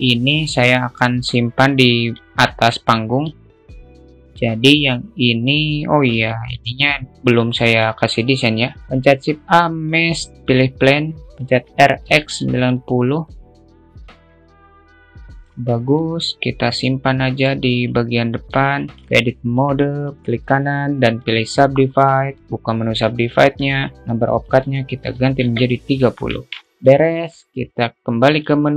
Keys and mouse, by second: 0.3-1.6 drag, 2.5 ctrl+click, 3.7 click, 4.5 click, 6.8 shift+middle click, 8.2 click, 9.3 shift+a, 11.5 r, 13.5 click, 13.8 click, 14.3 click, 15.5-15.9 alt+middle drag, 16.5-18.1 drag, 18.1-18.9 alt+middle drag, 19.6 alt+middle click, 20.0 Tab, 20.1-21.7 right drag, 22.8 click, 24.0-26.3 drag, 26.6 Tab, 26.7-27.4 alt+middle drag, 27.5 shift+middle click.